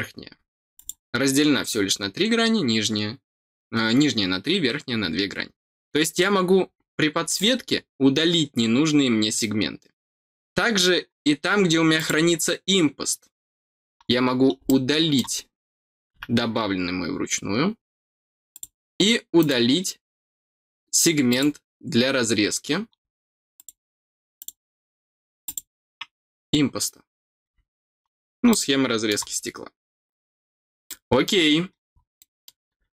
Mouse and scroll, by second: 0.7 click, 1.6 scroll down 1, 7.2 click, 11.9 click, 14.6 middle click, 18.5 click, 19.3 click, 21.2 click, 23.5 click, 24.3 click, 25.4 click, 28.4 middle click, 30.8 middle click, 31.8 middle click, 32.1 middle click.